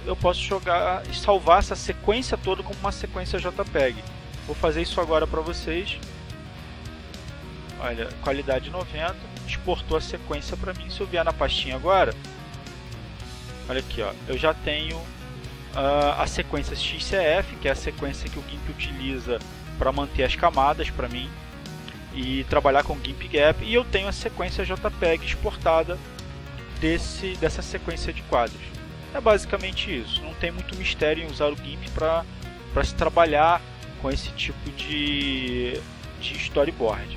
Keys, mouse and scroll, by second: 6.4 click, 8.5 click, 10.8 click, 12.2 click, 15.0 click, 34.6 click.